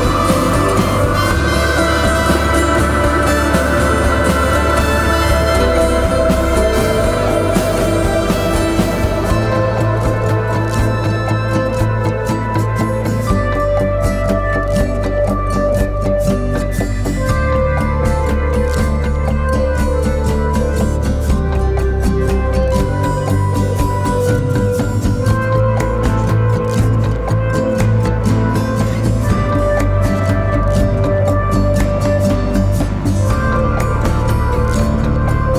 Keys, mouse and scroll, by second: 10.5 double click.